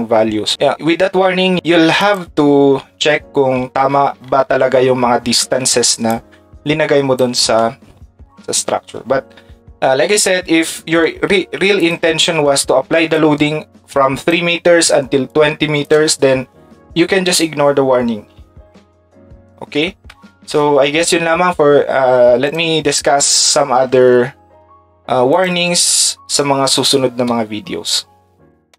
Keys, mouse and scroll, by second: 2.0 click, 6.1-7.2 ctrl+drag, 11.8 click, 23.9 shift+Tab, 25.3 click, 28.7 click.